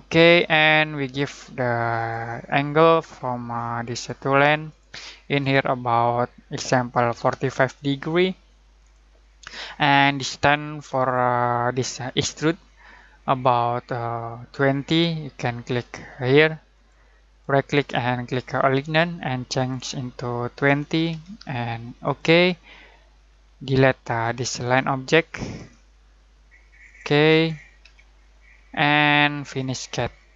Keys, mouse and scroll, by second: 7.1 4, 8.7 click, 16.7 click, 17.4 right click, 18.6 click, 20.5 2, 22.0 click, 23.3-24.0 scroll down 1, 24.0 click, 25.5 Escape, 26.8 click, 27.8 Delete, 28.5 scroll down 1, 29.8 click.